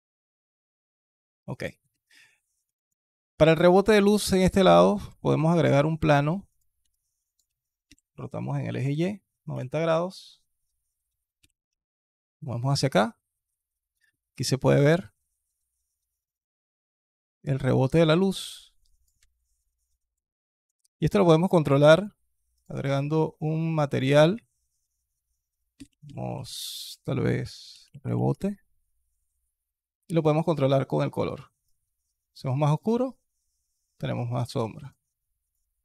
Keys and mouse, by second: 1.2-2.1 alt+drag, 2.5 alt+click, 3.3 alt+click, 5.0 shift+a, 7.7 r, 11.2 g, 18.3 alt+click, 19.0 s, 20.2 alt+drag, 21.8 drag, 23.6-28.2 drag, 26.7 BackSpace, 34.6 click.